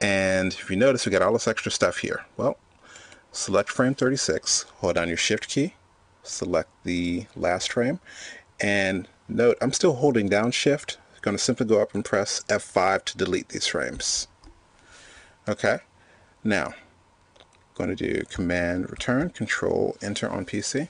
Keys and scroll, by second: 14.5 shift+F5, 18.9 super+Return.